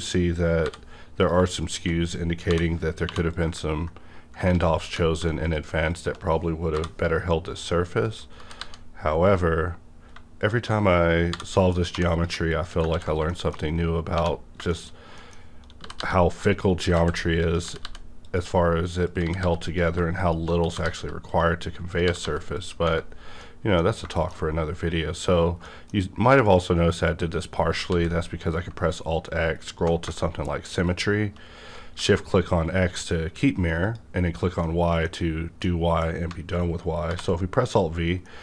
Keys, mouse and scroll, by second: 0.6 j, 1.2 click, 1.6 shift+click, 2.5-3.0 typing, 4.5-5.1 typing, 5.4 click, 5.9 shift+click, 6.7 j, 8.4 g, 8.6 g, 9.3 click, 10.4 click, 11.3 j, 11.9 j, 12.0 j, 12.1 click, 12.7 shift+click, 12.9 ctrl+x, 13.3 middle click, 14.1 1, 14.4 scroll down 1, 14.7 shift+middle click, 15.8 g, 16.0 g, 16.4 click, 16.4 click, 17.0 ctrl+z, 17.4 click, 17.6 g, 17.8 g, 18.2 click, 19.0 click, 19.2 g, 19.4 g, 19.7 click, 20.2 shift+click, 20.6 g, 20.8 g, 21.9 click, 22.1 g, 22.2 g, 22.6 click, 22.8 Tab, 23.0 scroll down 1, 23.4 middle click, 23.6 scroll down 1, 24.1 shift+middle click, 24.4 scroll down 1, 25.4 scroll down 1, 25.6 middle click, 27.5 scroll down 1, 27.9 alt+x, 28.8-29.1 alt+scroll down 1, 29.6 alt+scroll up 1, 30.9 shift+click, 33.8 shift+click, 34.6 middle click, 35.2 scroll up 1, 35.6-37.6 middle drag, 37.1 alt+v, 37.6 click, 38.2 middle click, 38.3-38.4 middle drag.